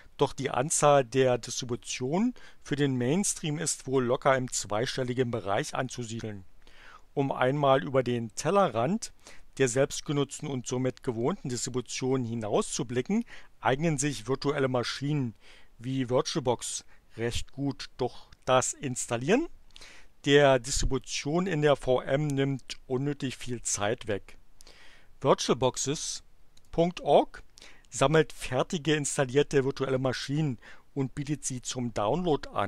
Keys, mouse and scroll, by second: 26.6 click.